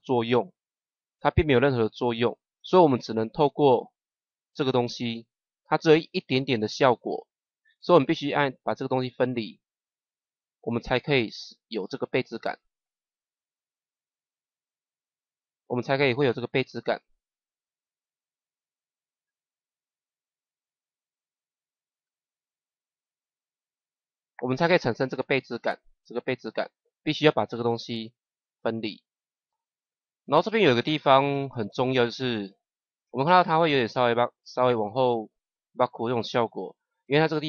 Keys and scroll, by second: 31.7 space.